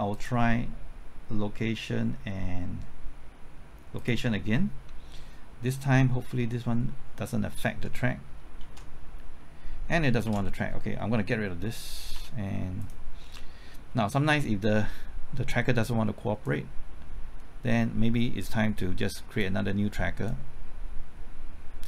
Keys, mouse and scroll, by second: 0.1 click, 8.0 typing, 8.8 ctrl+t, 10.1 typing, 10.2 ctrl+z, 12.1 x, 12.8 click, 13.2-13.8 scroll down 1, 13.8-14.5 scroll up 1, 16.4-21.8 drag.